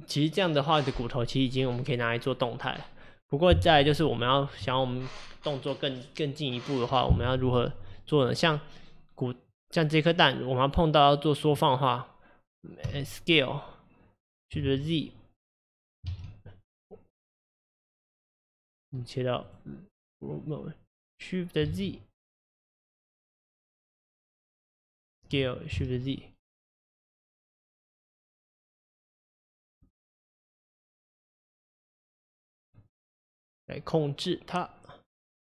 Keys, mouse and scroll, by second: 12.9 s, 19.5-21.8 drag, 21.8 shift+z, 22.6 click, 24.3 click, 25.3 s, 29.9-32.8 middle drag, 32.8-35.5 drag.